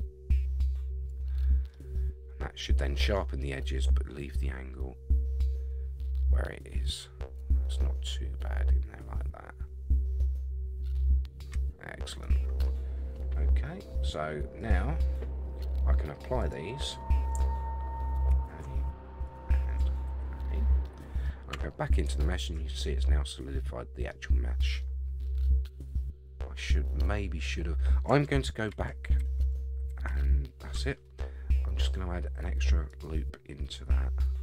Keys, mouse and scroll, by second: 1.7-3.1 middle drag, 3.5-12.6 middle drag, 14.6 click, 16.4 click, 18.3 ctrl+a, 19.2 click, 20.1 ctrl+a, 20.8 middle click, 21.5 Tab, 22.2 shift+middle click, 22.7-24.1 middle drag, 24.3 scroll up 1, 24.8 middle click, 25.3-25.7 scroll up 5, 27.1 scroll down 2, 28.7 ctrl+z, 29.2 ctrl+z, 29.9 ctrl+z, 32.9 click, 34.2-34.4 scroll down 4.